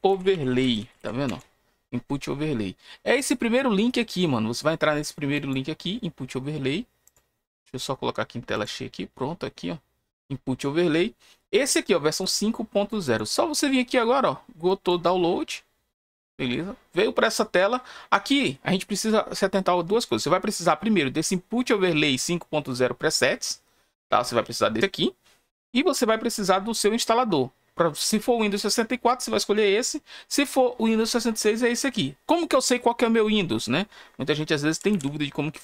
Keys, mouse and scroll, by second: 0.0-1.2 typing, 5.2 click, 6.9 click, 8.4 click, 12.1 click, 12.9 click, 14.6 click, 17.3-18.6 scroll down 4, 34.9 Tab.